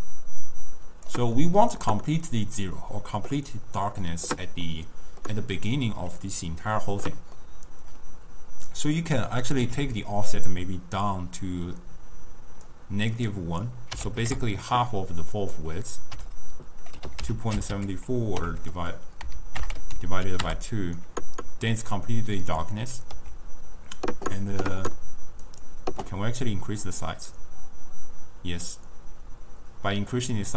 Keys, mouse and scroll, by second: 0.5 click, 1.5 middle click, 2.0-4.8 scroll up 1, 4.8 scroll up 1, 4.8-7.5 middle drag, 7.5-8.3 scroll up 1, 8.3 scroll up 1, 8.6 scroll down 1, 8.8 click, 9.7-10.1 scroll up 1, 10.1-13.2 drag, 13.3-18.6 drag, 22.6 click, 23.3 s, 26.1 scroll down 1, 26.2-26.5 scroll up 1, 26.6-29.7 drag.